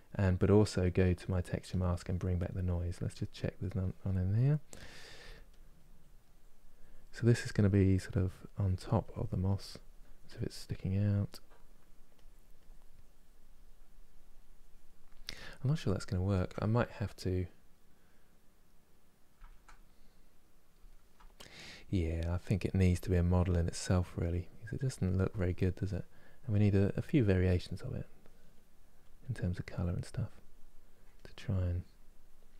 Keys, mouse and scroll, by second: 2.2-3.7 drag, 3.7-4.9 middle drag, 4.9 f, 5.4-15.4 drag, 15.4-21.4 middle drag, 21.4-27.4 drag, 27.4 middle click, 27.6-32.5 drag.